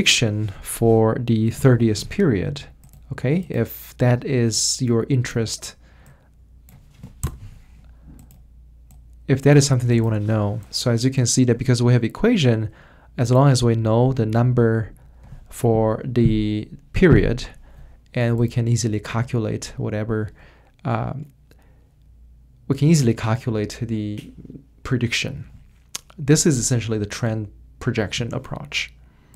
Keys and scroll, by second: 1.2-2.0 typing, 3.6-4.3 typing, 7.2 BackSpace.